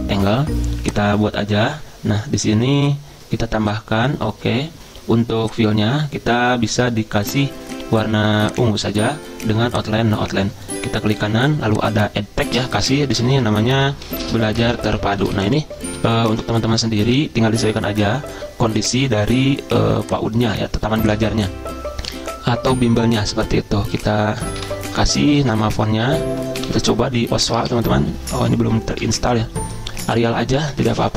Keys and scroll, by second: 12.6-16.9 typing, 17.5 shift+F3, 17.7 shift+F3, 17.9 shift+F3, 18.1 shift+F3, 19.0 shift+F3, 19.1 shift+F3, 24.1-28.3 typing, 30.3-31.1 typing.